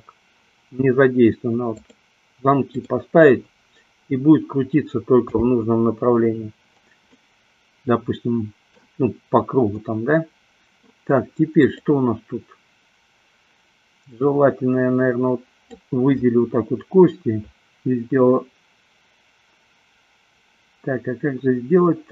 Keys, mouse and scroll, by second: 5.2 n, 7.4-9.2 middle drag, 9.9-11.2 middle drag, 11.9-13.2 drag, 14.4-16.0 drag.